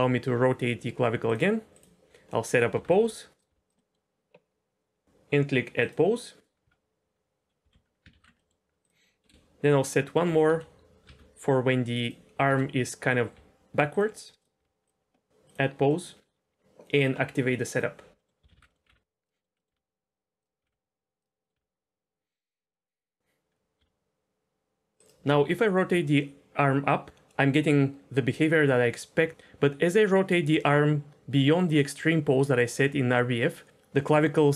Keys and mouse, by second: 1.7 click, 2.3 middle click, 2.7 r, 2.9 r, 3.5 r, 3.7 middle click, 5.8 click, 7.6 a, 8.1 alt+r, 8.4 middle click, 8.8 click, 9.2 KP_7, 9.9 middle drag, 10.4 KP_1, 11.0 r, 12.4 KP_7, 13.3 r, 13.9 click, 14.6 r, 15.8 middle click, 17.8 click, 18.2 middle click, 18.4 a, 18.6 alt+r, 19.2 click, 19.3 middle click, 19.5 middle click, 19.7 r, 20.6 r, 20.7 r, 21.4 middle click, 21.5 r, 22.7 click, 23.5 KP_1, 23.8 r, 25.3 r.